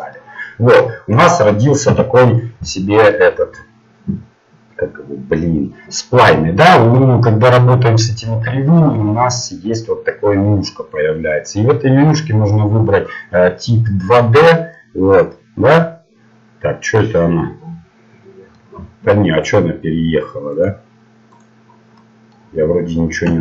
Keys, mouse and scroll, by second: 1.9 Tab, 2.5-4.9 middle drag, 13.7-15.5 drag, 14.9-16.6 middle drag, 19.4-23.4 drag, 22.1-23.4 middle drag.